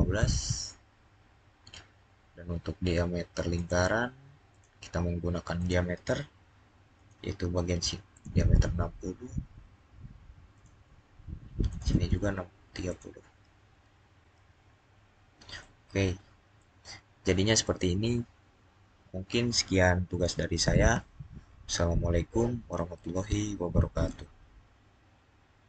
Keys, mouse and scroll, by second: 3.3 click, 10.4 click, 14.7 scroll down 2, 15.4 middle click, 23.7 middle click, 23.8 click.